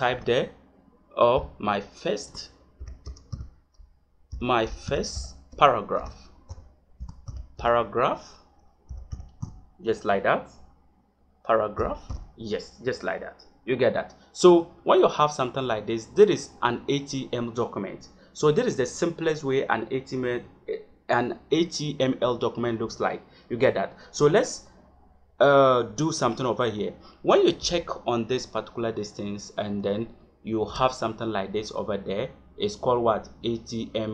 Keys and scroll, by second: 0.0 Caps_Lock, 1.2 m, 2.2 Caps_Lock, 2.7 y, 3.0 space, 4.3 i, 5.9-7.5 typing, 8.8 g, 12.0 h, 27.5 Tab, 30.6 Tab.